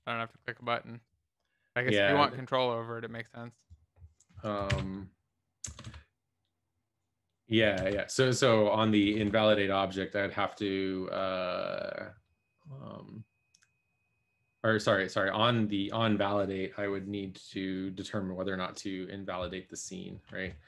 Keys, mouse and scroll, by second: 0.0-0.5 typing.